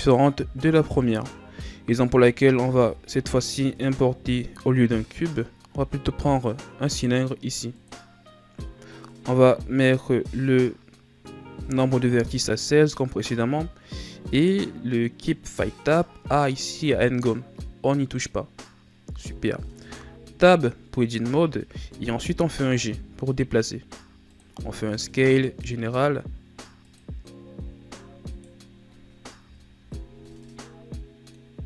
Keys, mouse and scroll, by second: 0.6 KP_1, 2.6 shift+a, 19.7 Tab, 21.4-22.1 scroll down 2, 22.3 g.